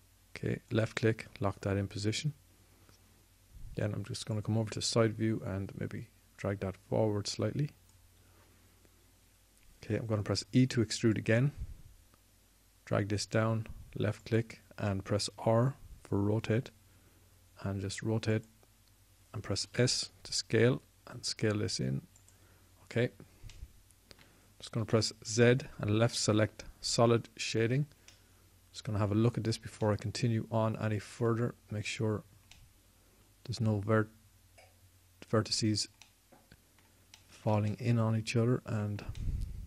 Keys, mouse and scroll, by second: 11.1 e, 16.0 r, 19.4 click, 20.4 s, 25.5 z, 26.9 z, 30.8-36.1 middle drag.